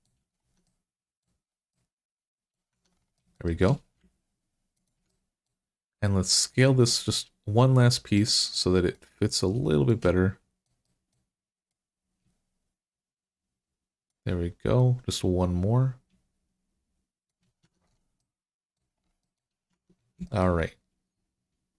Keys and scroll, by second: 0.3 Tab, 2.5 Tab, 17.5 Tab, 19.5 Tab.